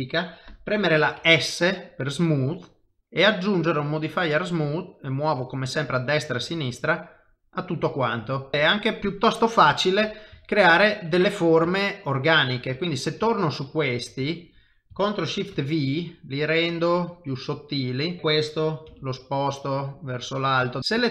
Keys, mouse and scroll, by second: 6.8 middle click, 9.0 middle click, 10.4 shift+middle click, 11.1 middle click, 11.7 shift+middle click, 12.7 click, 13.4 shift+click, 14.2 click, 15.5 ctrl+shift+v, 18.2 middle click, 18.2 click, 18.9 g, 20.7 middle click, 20.8 ctrl+middle click, 20.8 shift+click.